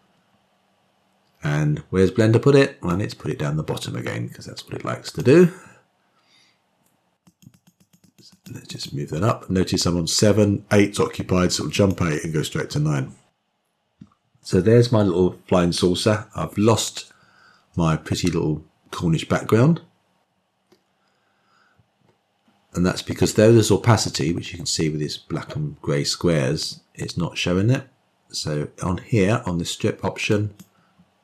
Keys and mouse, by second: 3.9-6.3 drag, 8.5 click, 8.7 click, 8.9 click, 9.3 click, 9.8 click, 12.8 click.